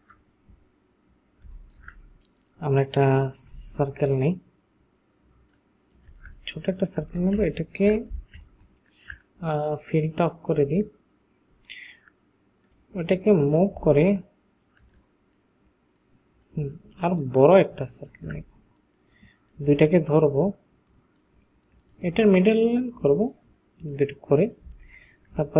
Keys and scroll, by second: 1.6 ctrl+space, 6.3 ctrl+alt+shift+space, 7.4 ctrl+alt+shift+space, 8.4 ctrl+alt+shift+space, 24.8 ctrl+space.